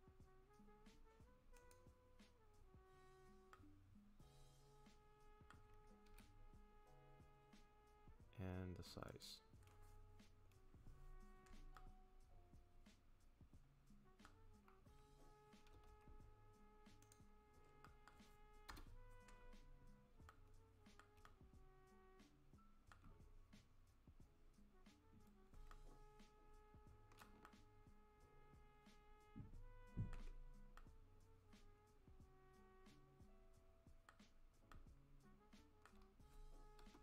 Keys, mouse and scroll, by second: 3.5 middle click, 6.1 s, 11.7 middle click, 15.7 s, 17.8 middle click, 18.7 KP_0, 20.3 middle click, 21.2 shift+middle click, 23.2 scroll up 1, 23.6 scroll down 1, 24.6-25.0 scroll up 1, 25.0 scroll down 1, 25.7 shift+middle click, 27.4 ctrl+middle click, 30.8 middle click, 34.7 shift+middle click, 35.8 shift+middle click, 36.8 KP_0.